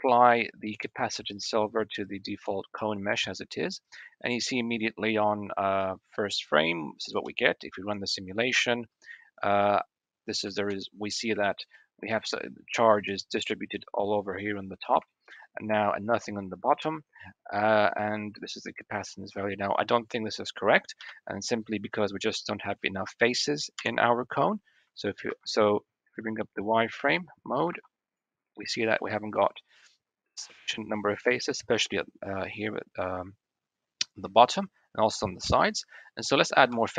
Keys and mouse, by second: 7.1 space, 10.4 space, 11.3 shift+drag, 15.0 shift+click, 15.3-15.8 middle drag, 16.5-16.8 middle drag, 17.1-17.6 middle drag, 17.8-18.2 middle drag, 19.3 click, 20.8 KP_1, 23.6 /, 25.1 alt+v, 26.8 alt+v, 27.6 alt+v, 28.4-30.5 drag, 34.1-34.5 drag, 35.3 KP_1, 36.6 Tab.